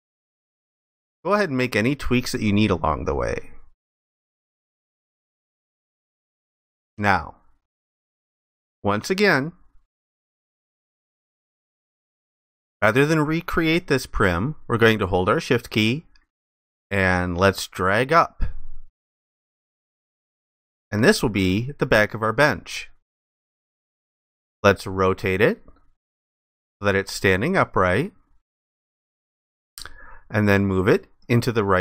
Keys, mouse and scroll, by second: 0.0 ctrl+shift+click, 2.8 ctrl+shift+click, 5.4 alt+click, 9.0 alt+click, 16.4 shift+click, 20.3 alt+click, 25.7 ctrl+click.